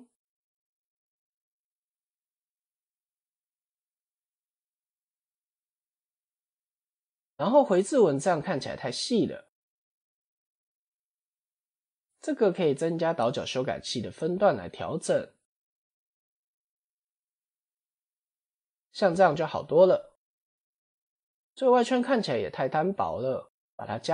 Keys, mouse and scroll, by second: 1.1 click, 1.9 click, 3.8 click, 4.8 click, 7.4 middle click, 8.0-9.2 scroll up 3, 9.9 click, 11.0-11.6 scroll down 8, 12.7 click, 16.0-18.8 drag, 20.0-20.5 middle drag, 20.5 scroll down 4, 21.0-21.3 middle drag, 22.2-22.7 middle drag, 22.7 scroll up 4, 23.4 click.